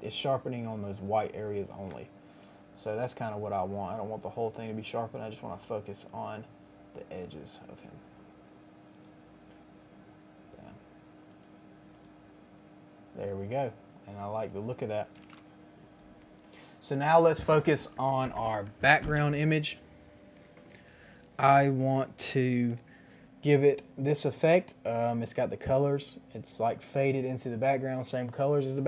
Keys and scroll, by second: 15.2 Return.